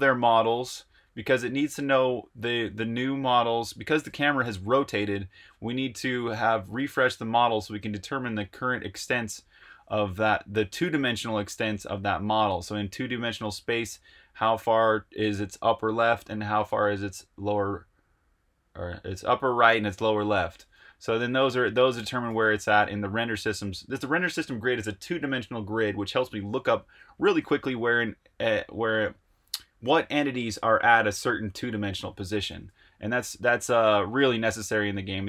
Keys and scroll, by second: 0.0-0.1 typing, 20.8 Escape, 21.0 j, 21.2 j, 21.5 j, 22.2 shift+v, 32.8 Escape, 33.0-35.2 typing.